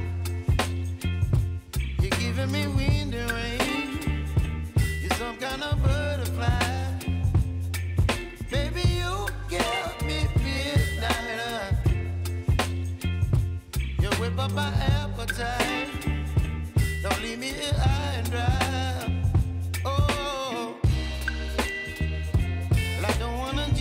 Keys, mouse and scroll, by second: 22.9 Left.